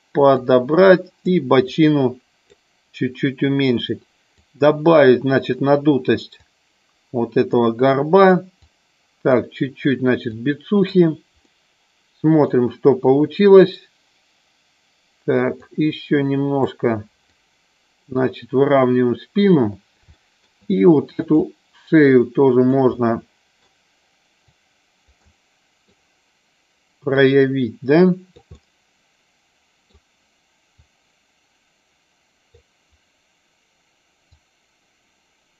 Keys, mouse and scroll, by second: 0.4 click, 1.7 click, 4.3-5.4 drag, 6.4 click, 8.5 click, 10.2 click, 11.3 middle click, 15.6-16.7 drag, 17.2 click, 20.0 shift+middle click, 21.2 click, 21.4-22.7 drag, 22.9 middle click, 24.4 click, 25.2 middle click, 27.2-28.3 drag, 28.4-29.8 middle drag, 30.8-32.6 drag, 34.3-35.5 drag.